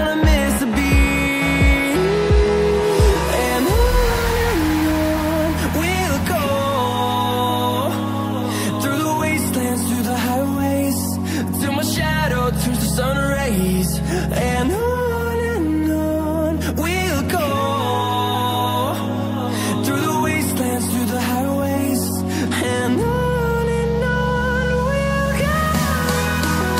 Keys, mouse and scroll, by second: 0.9 click, 5.8 click, 9.7-11.1 scroll down 1, 11.1 click, 18.9 click, 22.8 scroll up 1, 23.9 click.